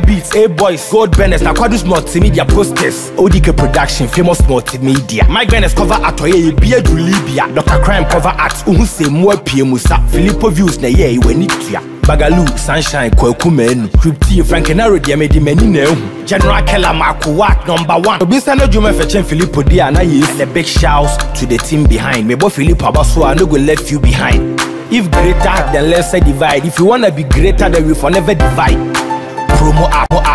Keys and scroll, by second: 4.6 ctrl+0.